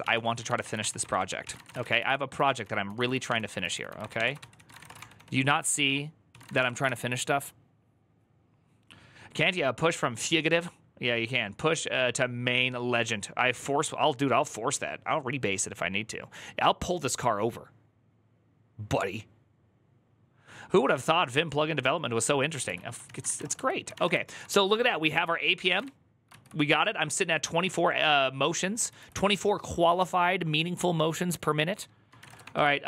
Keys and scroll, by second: 0.0-6.8 typing, 22.8-23.8 typing, 23.8 Return, 24.0 ctrl+u, 25.1-26.0 typing, 26.1 ctrl+u, 28.3-29.1 typing, 31.9-32.8 typing.